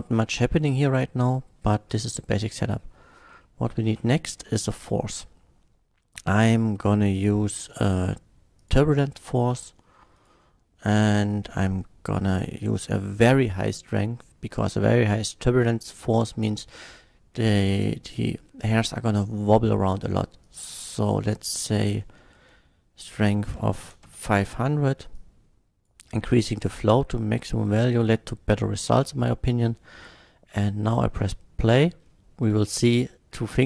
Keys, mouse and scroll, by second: 0.3 middle click, 1.0-1.7 middle drag, 3.5 KP_1, 3.9 shift+a, 8.6 click, 10.1 click, 12.3 click, 20.5 click, 20.9 click, 23.5 KP_5, 23.7 KP_0, 23.9 KP_0, 24.0 Return, 25.1 click, 26.9-27.6 middle drag, 30.3-30.7 middle drag, 31.1 scroll up 1, 31.6 middle click, 32.6 middle click.